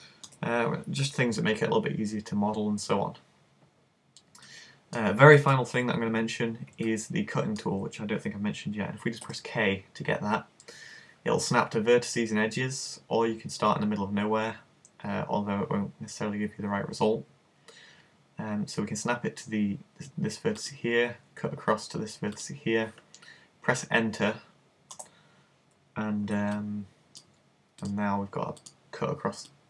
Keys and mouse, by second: 5.5 super+z, 9.3 k, 27.1 middle click, 27.8-29.6 drag, 29.5-29.6 right drag.